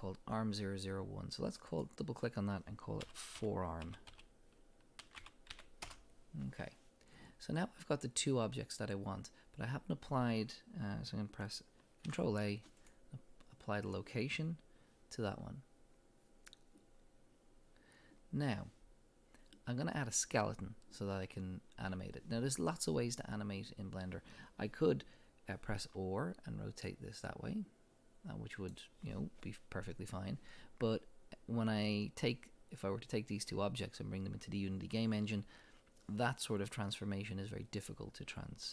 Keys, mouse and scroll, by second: 0.7-1.3 scroll down 1, 1.3 click, 1.7-15.3 drag, 5.9 Return, 12.1 ctrl+a, 16.7-26.7 drag, 25.8 r, 28.7 click, 28.7 right click.